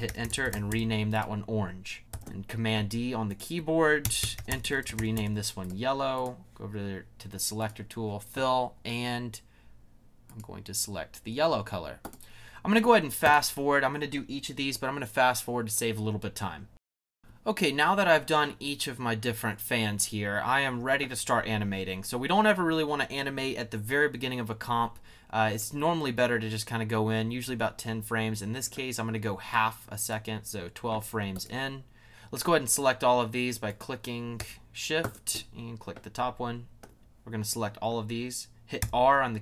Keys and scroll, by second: 0.0-1.0 typing, 2.1 super+d, 4.0 Return, 4.1-5.4 typing, 38.8 r.